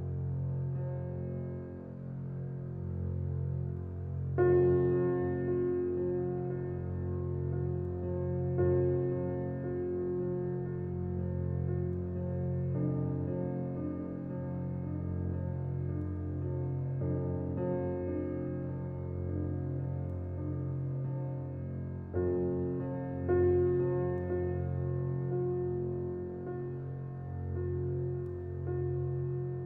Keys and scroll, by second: 29.0-29.6 typing.